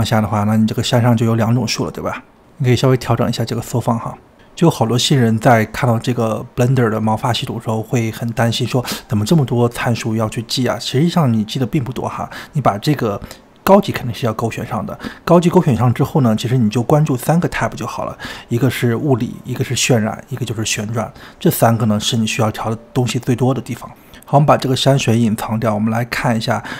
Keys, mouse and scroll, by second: 3.1 click, 3.9 scroll down 3, 4.1 middle click, 4.5-7.1 scroll up 2, 12.7 click, 14.1-23.8 drag.